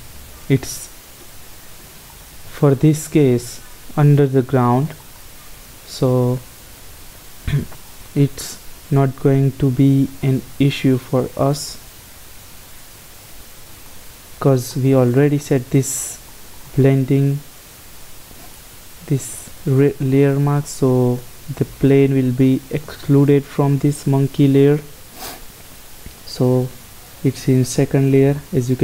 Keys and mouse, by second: 4.4-6.2 drag, 7.9-9.8 drag, 10.3-12.2 drag, 14.0-16.4 middle drag, 22.3-24.2 right drag, 26.2 right click.